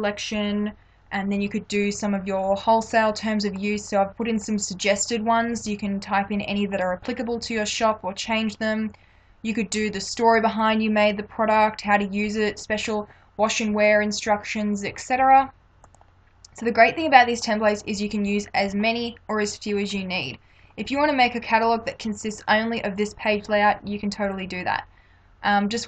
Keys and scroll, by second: 16.1 space.